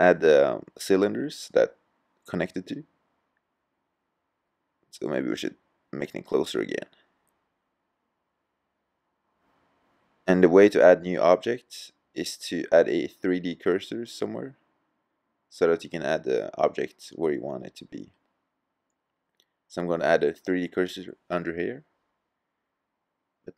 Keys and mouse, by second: 2.6 g, 9.4-10.3 drag, 10.4-13.0 middle drag, 16.6-18.6 middle drag, 20.7 middle click, 22.0-22.5 middle drag.